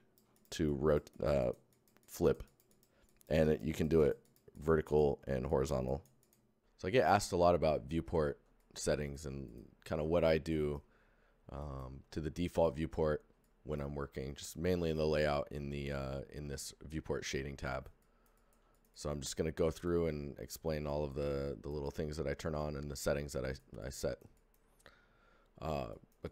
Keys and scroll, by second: 0.3 shift+Tab.